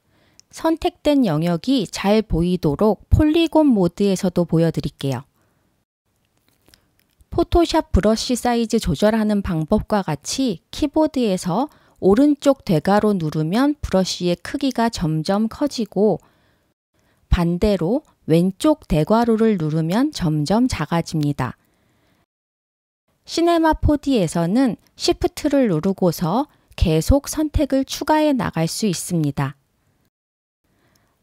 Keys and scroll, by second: 7.4 ], 17.3 [, 22.2 ], 22.7 [.